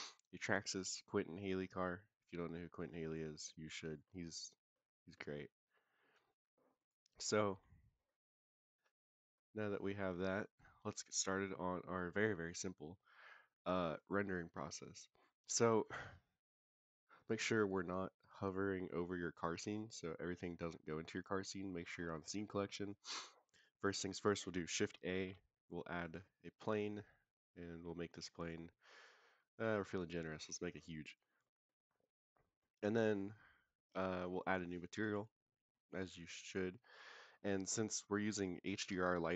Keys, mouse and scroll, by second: 1.9-8.7 middle drag, 8.7 click, 9.3-9.9 middle drag, 10.2 click, 10.6-11.1 scroll down 1, 11.1-11.5 middle drag, 11.1 scroll down 1, 17.1 click, 18.7 click, 19.5 click, 22.2-23.2 middle drag, 25.1 shift+a, 27.2-29.2 scroll down 5, 29.2 s, 31.1 click, 31.4 middle click, 31.8-32.2 scroll up 3, 32.3 middle drag, 34.4 click, 36.9 click.